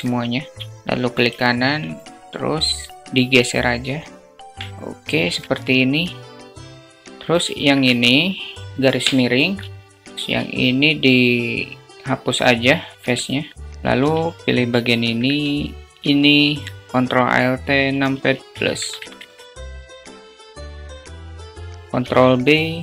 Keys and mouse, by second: 1.3 alt+click, 2.3-4.2 drag, 4.2 Tab, 4.6 `, 8.6 /, 9.5-9.9 middle drag, 10.0 Tab, 11.6 x, 12.1 alt+middle click, 13.6 2, 14.2 middle click, 15.2 shift+click, 21.6 ctrl+shift+b.